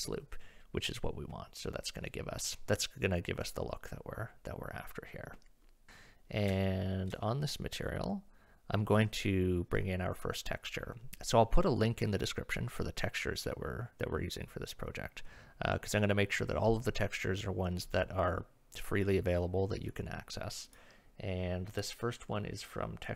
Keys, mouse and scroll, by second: 6.6 shift+middle drag.